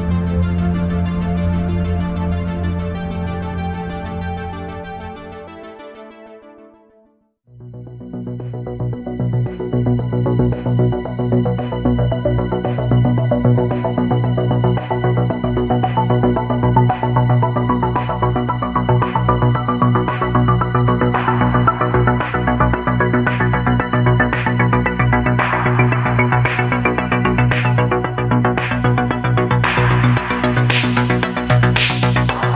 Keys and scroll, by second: 1.4 ctrl+z, 3.0 ctrl+z, 4.3 ctrl+z, 4.9 ctrl+shift+z, 6.3 ctrl+z, 7.0 ctrl+z, 7.7 ctrl+z, 8.1 ctrl+z, 8.6 ctrl+z, 10.2 ctrl+z, 10.4 ctrl+z, 11.5 ctrl+z, 11.7 ctrl+z, 14.2 ctrl+z, 15.0 ctrl+z, 16.4 ctrl+z, 19.3 space, 20.0 space, 22.1 ctrl+z, 23.7 space, 24.8 ctrl+z, 25.6 ctrl+z, 29.2 ctrl+z, 29.6 ctrl+z.